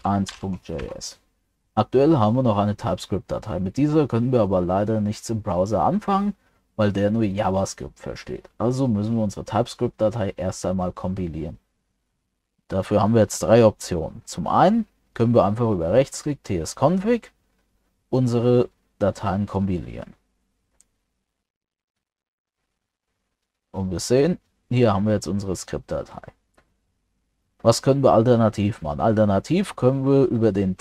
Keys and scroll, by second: 0.8 ctrl+s.